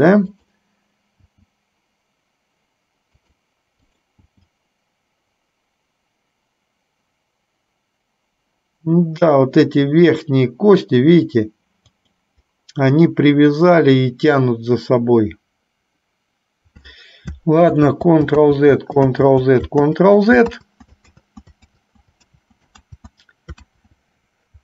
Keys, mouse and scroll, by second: 4.0 click, 17.9 ctrl+z, 19.5 ctrl+z, 20.3 ctrl+z, 20.9 ctrl+z, 23.3 ctrl+z, 24.0 ctrl+z.